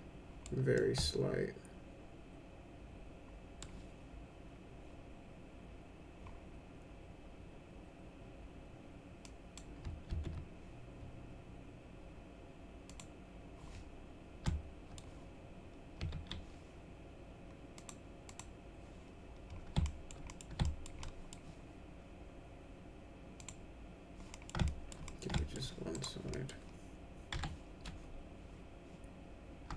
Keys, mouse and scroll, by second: 0.7-3.5 alt+middle drag, 9.2 click, 10.1 ctrl+z, 12.8 click, 14.4 alt+middle click, 16.1 ctrl+z, 17.7 click, 18.2 click, 19.8 alt+middle click, 20.2 middle click, 20.6 alt+middle click, 21.0 middle click, 23.3 click, 24.3 middle click, 24.6 alt+middle click, 25.0 middle click, 25.3 alt+middle click, 25.9 click, 26.3 middle click, 27.3 F4.